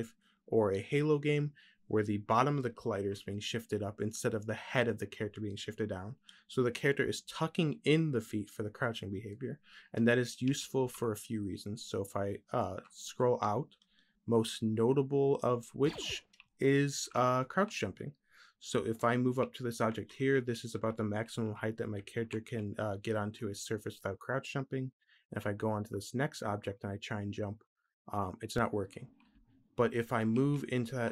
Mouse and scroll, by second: 12.2-16.2 middle drag.